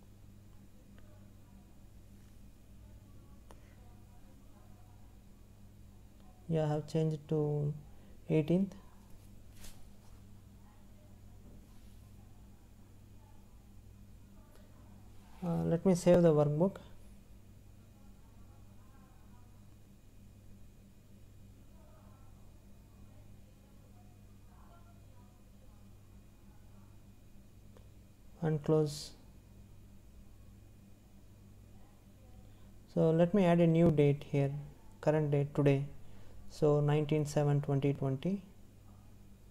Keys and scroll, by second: 18.5 space.